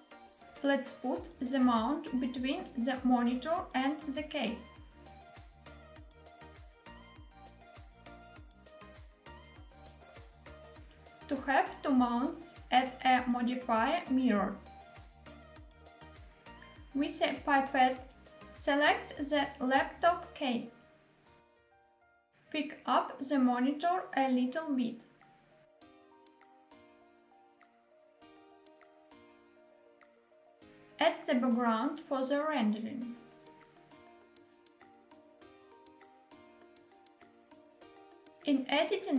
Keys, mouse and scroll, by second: 0.4 g, 2.4 click, 2.9 middle click, 3.4 middle click, 4.4-4.9 shift+middle drag, 4.9 g, 6.4 click, 7.2 g, 8.3 click, 8.9 g, 9.9 click, 10.2-10.7 scroll down 2, 11.9 click, 13.5-15.7 drag, 17.7 click, 22.3 shift+middle click, 22.3 scroll up 1, 22.4 click, 24.0 g, 24.8 z, 28.2 click, 28.7-30.6 middle drag, 30.7 shift+a, 32.4 scroll down 1, 32.5-32.9 scroll up 1, 32.9-33.4 scroll down 2, 33.4-33.8 middle drag, 33.4 scroll down 1, 34.3 s, 38.0 click, 38.4 middle click, 38.4-38.7 scroll down 2, 38.7 Tab.